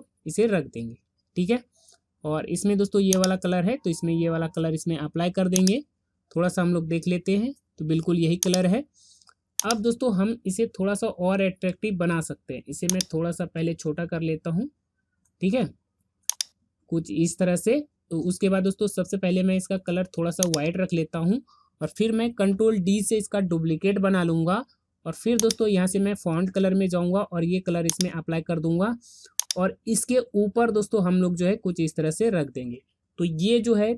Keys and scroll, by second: 22.8 ctrl+d.